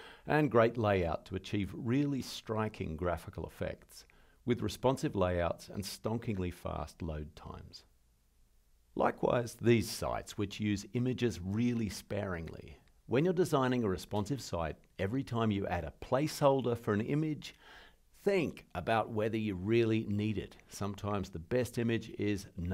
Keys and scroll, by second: 0.7 alt+super+Right, 8.3 alt+super+Left, 10.0 alt+super+Right, 14.2 alt+super+Right, 15.7 alt+super+Right.